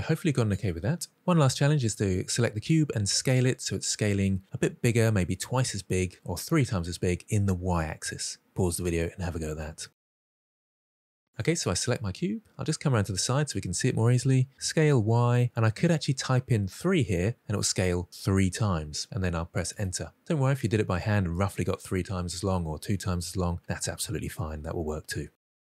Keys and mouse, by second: 11.3 click, 11.8-13.0 middle drag, 14.4 s, 14.9 y, 16.2 3, 19.5 Return.